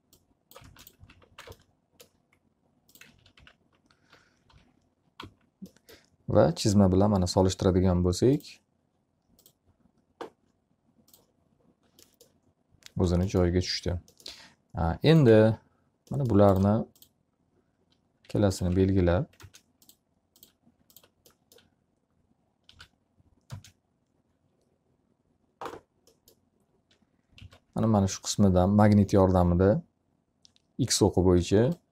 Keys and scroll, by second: 0.3 s, 1.3 space, 1.7 x, 1.9 z, 2.2 alt+a, 3.8-5.9 typing, 15.6 alt+a, 19.7 ctrl+space, 23.4 w, 24.2 space, 28.1 s.